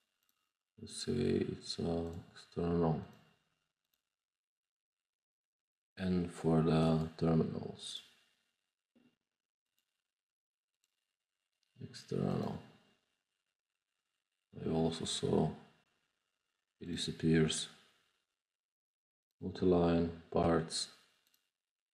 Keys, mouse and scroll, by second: 0.1 click, 2.0 click, 3.0 click, 3.8 click, 4.3 middle click, 5.0-5.4 middle drag, 6.7 click, 6.8 right click, 7.8 click, 9.6 click, 10.6 click, 12.2 click, 16.8 drag, 19.2 click, 21.2 drag.